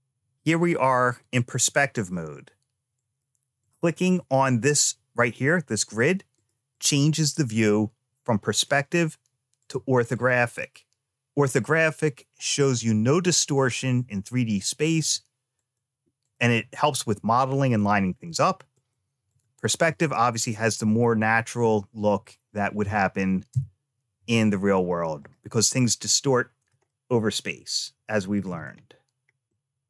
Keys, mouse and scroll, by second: 2.8 click, 3.5 click, 5.1 click, 5.5 click, 5.8 click, 6.2 click, 6.6 click, 8.4 click, 9.5 click, 10.0 click, 10.4 click, 14.8 click, 15.4 click, 16.1 click, 18.6 click, 19.1 click, 20.6-22.1 middle drag, 23.4 `, 26.7-28.3 shift+middle drag, 29.1 scroll down 1, 29.3-29.8 middle drag.